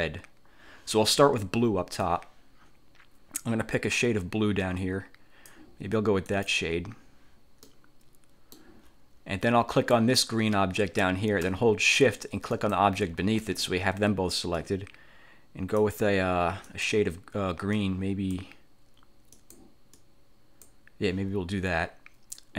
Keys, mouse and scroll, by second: 2.1-5.8 drag, 6.4 click, 7.8-8.8 middle drag, 9.8 click, 12.6 shift+click, 14.6-16.1 drag, 16.8 click, 17.8 click, 19.4 click, 20.0 click.